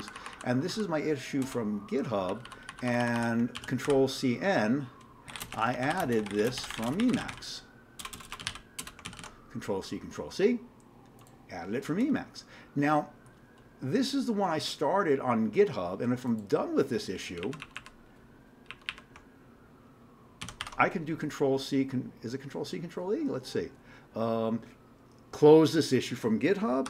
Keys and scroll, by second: 0.0 Down, 1.4 Return, 2.3 Down, 2.4 Down, 2.6 Down, 2.9 Down, 3.6 ctrl+c, 3.8 ctrl+n, 5.0-9.7 typing, 17.4 Up, 18.7 Up, 20.4 ctrl+c, 20.6 ctrl+e.